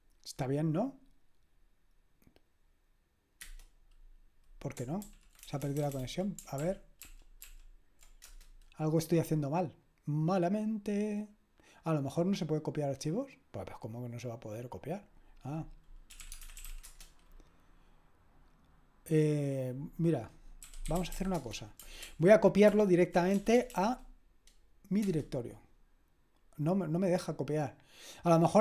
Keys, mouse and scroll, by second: 3.4 Return, 5.0 ctrl+p, 5.4 BackSpace, 5.6 BackSpace, 5.8 BackSpace, 6.0 BackSpace, 6.6 ctrl+p, 7.0 ctrl+p, 7.4 ctrl+p, 8.3 Return, 16.0-17.1 typing, 20.4-21.6 typing, 22.0 ctrl+p, 22.7 ctrl+p, 23.4 BackSpace, 23.5 BackSpace, 23.7 BackSpace, 23.9 BackSpace, 25.0 Return.